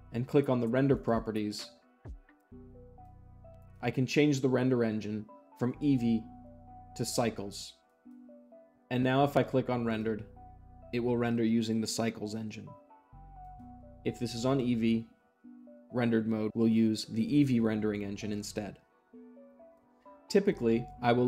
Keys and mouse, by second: 0.9-1.9 drag, 5.6-6.6 drag, 7.8 click, 9.8-10.8 drag, 13.3-14.4 drag.